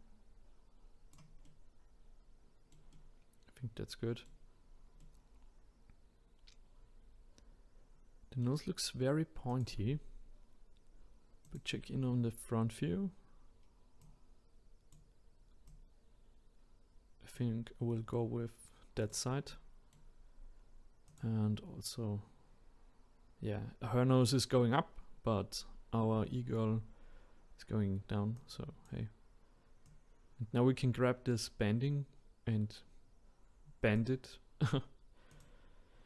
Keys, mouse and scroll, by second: 1.4-4.6 middle drag, 4.6-5.0 scroll down 1, 5.0-8.0 middle drag, 9.5 click, 10.0-11.4 scroll up 1, 11.4 click, 12.3-14.0 scroll up 2, 14.0 click, 15.7 click, 19.0 click, 19.5-21.1 middle drag, 21.1 click, 21.8-22.1 scroll up 1, 26.9-27.4 scroll down 2, 28.4-30.7 drag, 35.3-36.0 drag.